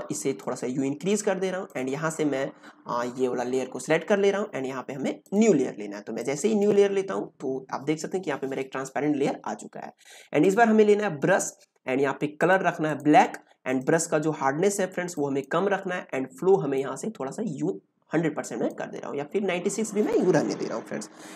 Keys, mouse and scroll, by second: 0.6 click, 5.2-10.3 drag, 13.6 right click, 15.1-21.3 drag.